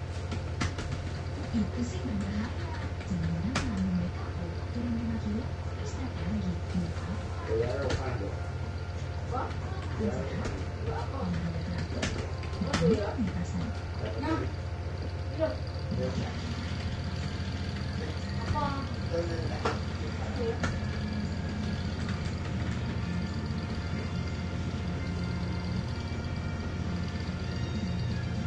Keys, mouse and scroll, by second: 0.0-3.8 typing, 6.8-8.2 typing, 9.9-15.5 typing, 16.7-18.5 typing, 20.0-23.3 typing, 27.4 click.